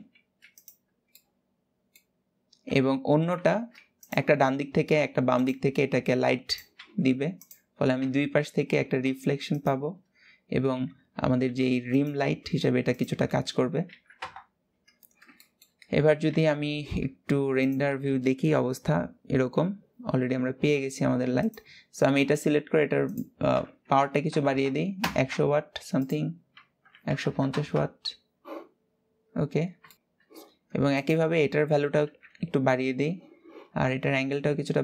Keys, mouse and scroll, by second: 0.8-2.3 middle drag, 2.3 KP_7, 3.1 shift+d, 4.0 r, 5.3 g, 6.4 r, 7.7 KP_1, 8.7 r, 10.4 KP_7, 11.1 g, 11.9 r, 13.9 KP_0, 14.7 scroll down 4, 15.0-16.2 shift+middle drag, 16.2-17.3 scroll up 1, 17.3 click, 21.2 click, 24.7 KP_0, 25.7-28.5 drag, 28.5-29.2 scroll up 4, 29.7 shift+middle click, 29.9-30.6 scroll down 4, 30.6 click, 31.9 KP_7.